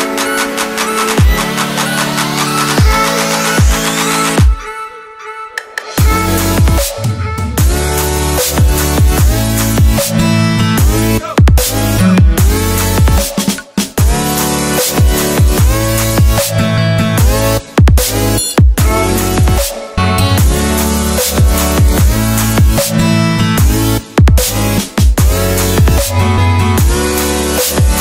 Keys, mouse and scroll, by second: 0.0-1.4 typing, 1.8 click, 2.3 ctrl+t, 2.5 click, 2.9 Return, 3.1 click, 4.0-7.0 typing, 7.1 click, 10.1 ctrl+Num_Lock, 10.3 t, 11.6 Return, 12.2 click, 13.2 Left, 13.6 click, 15.1 ctrl+s, 16.9 ctrl+s, 18.2 click.